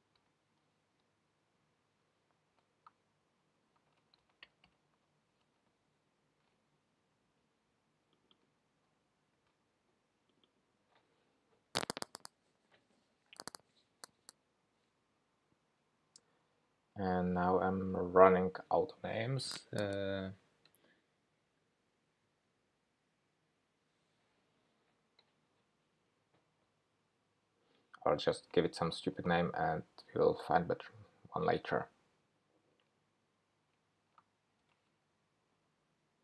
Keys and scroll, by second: 9.4 super+c, 17.0 super+v, 17.1 super+v.